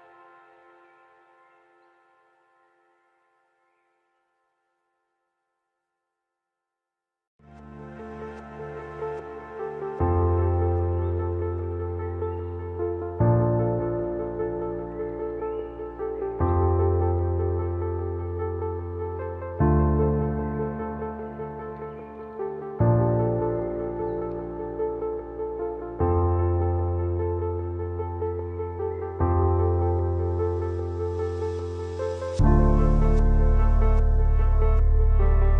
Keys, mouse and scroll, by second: 2.3-8.9 drag, 8.9-14.5 alt+shift+drag, 23.5 click, 23.7 alt+scroll up 1, 24.0 scroll down 1, 24.3 alt+scroll up 1, 25.9 click, 26.9 shift+click, 27.8 ctrl+t, 29.7-31.7 shift+drag.